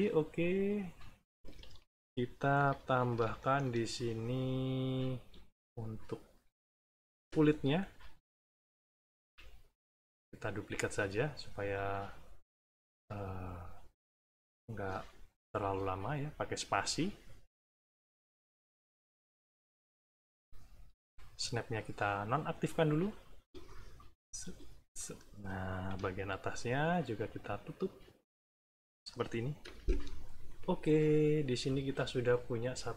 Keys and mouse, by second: 0.3 click, 1.4 Escape, 1.7 middle click, 2.5 =, 3.3 middle click, 4.5 click, 4.8 click, 6.2 shift+click, 7.2 Return, 9.2 s, 9.8-21.0 drag, 10.5 space, 11.7 space, 12.7 space, 13.7 space, 14.6 space, 15.6 space, 16.6 space, 17.8 space, 18.9 space, 21.7 click, 22.7-25.3 drag, 23.3 space, 24.4 space, 25.8 b, 27.0 click, 28.0 click, 29.6 Return, 30.7 middle click, 31.4 -.